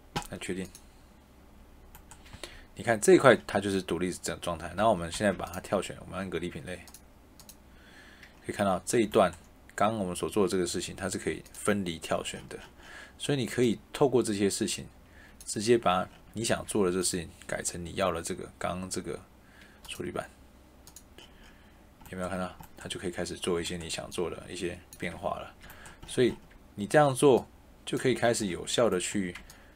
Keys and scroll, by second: 2.2 Escape, 4.6 Tab.